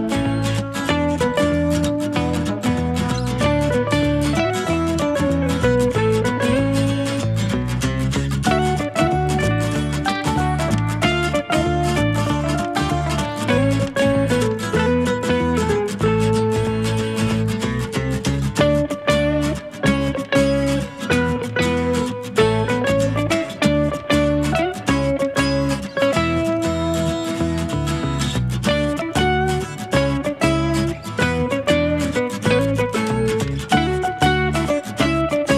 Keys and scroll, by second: 6.9 Escape, 7.1-7.8 typing, 9.7 space, 9.9 2, 11.6 space, 23.2 Escape, 23.3-24.0 typing, 28.5 space.